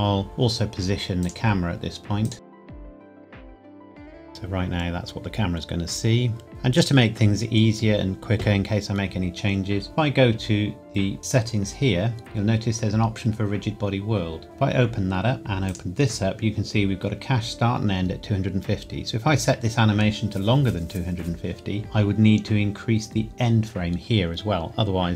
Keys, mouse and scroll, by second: 1.2 click, 2.5 middle click, 2.6 click, 3.0 g, 3.1 middle click, 3.2 r, 3.4 click, 3.6 r, 3.8 click, 4.2 space, 6.5 click, 11.2 click, 14.4 click, 15.7 click, 18.6 scroll down 1.